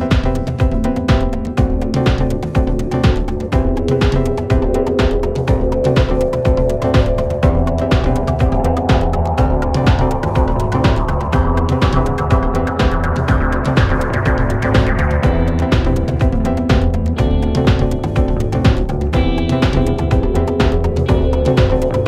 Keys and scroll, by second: 14.5 2, 15.0 Return, 16.4 1, 16.6 Return.